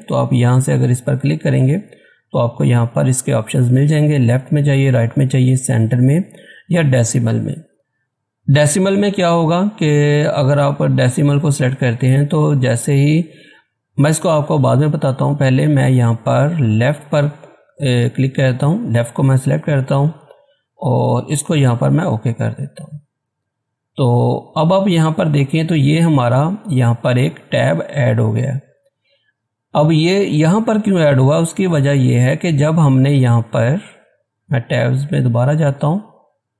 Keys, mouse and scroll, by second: 17.3 click, 17.3 typing, 17.4 click, 22.0 click, 33.8 click.